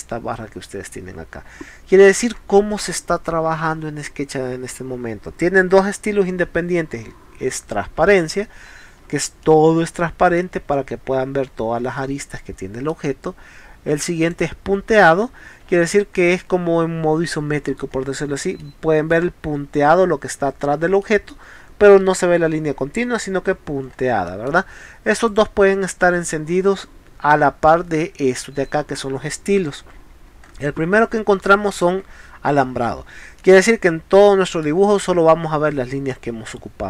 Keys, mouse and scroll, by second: 1.6 scroll down 1, 2.4 scroll up 1, 3.6 scroll up 1, 8.1 click, 8.6 scroll down 1, 9.4 middle click, 10.7-11.1 scroll up 4, 12.4-12.9 middle drag, 14.2 click, 15.2 scroll down 2, 16.7 scroll down 2, 18.6-19.3 middle drag, 21.0 middle click, 23.5 middle click, 23.9 middle click, 24.3 middle click, 25.3 click, 29.5 scroll down 2, 30.5 middle click, 31.8 click, 32.7-33.1 scroll down 4, 33.4 middle click, 34.9 scroll up 2.